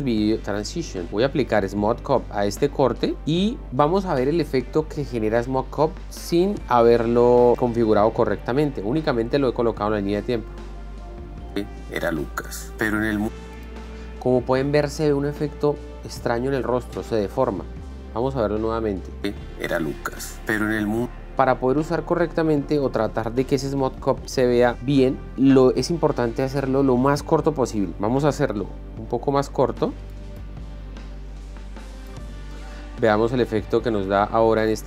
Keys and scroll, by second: 11.8 space, 19.6 space.